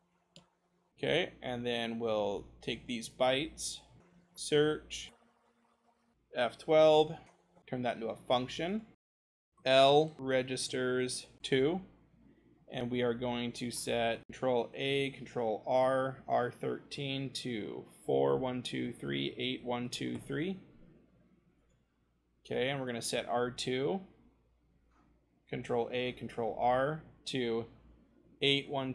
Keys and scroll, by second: 0.0-0.4 typing, 4.1 ctrl+c, 4.1 s, 4.2 ctrl+v, 7.5 f, 9.8-11.5 typing, 12.0-12.6 scroll, 13.4 l, 15.2 r, 17.9 4, 18.2 0, 19.2 8, 19.5 0, 26.1 r, 28.3 8, 28.6 0.